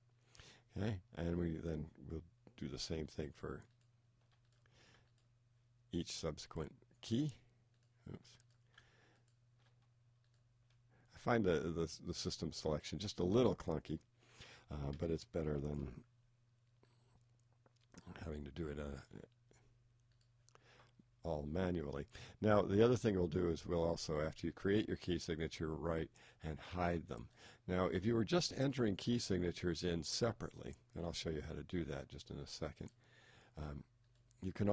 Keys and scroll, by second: 15.5 shift+t.